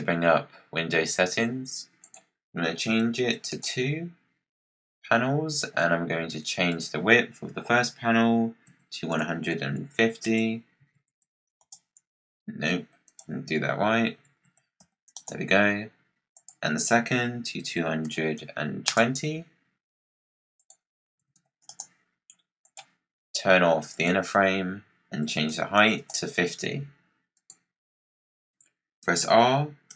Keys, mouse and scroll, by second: 1.9-4.9 drag, 6.6-9.7 drag, 13.0-16.0 drag, 16.2-17.7 drag, 17.7 2, 19.0 BackSpace, 20.5 click, 21.1 2, 22.6 click, 23.8-26.9 drag, 27.2 click, 27.9-28.2 scroll down 4, 28.9 r.